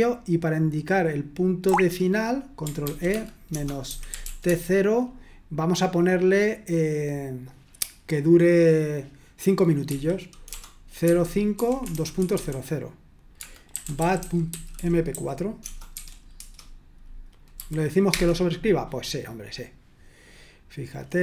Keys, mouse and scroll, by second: 1.6 typing, 2.8 ctrl+e, 3.1-4.7 typing, 9.8 typing, 11.0-17.5 typing, 18.1 Return.